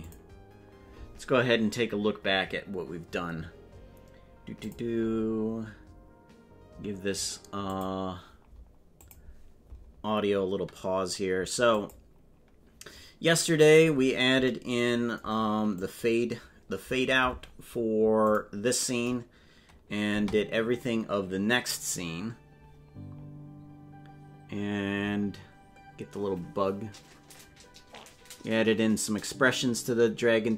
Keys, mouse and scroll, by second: 0.1 click, 11.8 click, 15.8 click, 18.2 click, 20.0 space, 23.2 scroll up 1.